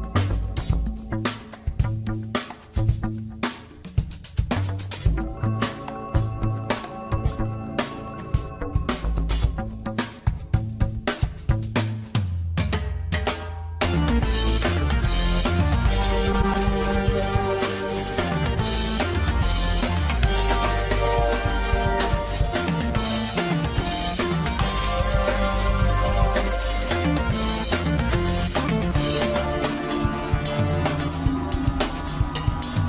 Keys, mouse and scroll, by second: 0.2-1.0 scroll up 3, 1.0-2.8 shift+middle drag, 2.8 scroll down 2, 3.2-4.2 shift+middle drag, 4.2 Tab, 4.9 middle click, 5.7 scroll up 2, 7.6 click, 8.5 click, 9.5 alt+shift+click, 10.0 alt+shift+click, 10.3 middle click, 11.2 alt+shift+click, 11.5 scroll down 2, 12.6 ctrl+b, 14.1-15.7 middle drag, 15.8 middle click, 16.5 click, 17.0 alt+shift+click, 17.3 alt+shift+click, 18.0 alt+shift+click, 18.4 middle click, 19.3 alt+shift+click, 19.8 alt+shift+click, 20.5 alt+shift+click, 21.0 middle click, 21.5-22.1 scroll up 2, 22.1 scroll up 1, 22.3 ctrl+b, 23.7 Tab, 24.0 scroll down 3, 24.2-25.6 middle drag, 25.6-26.0 scroll up 5, 26.0 Tab, 26.5 middle click, 27.0 click, 27.6 alt+shift+click, 27.9 alt+shift+click, 28.6 alt+shift+click, 29.3 ctrl+b, 30.6 Tab, 30.8 scroll down 4, 31.0-32.8 middle drag.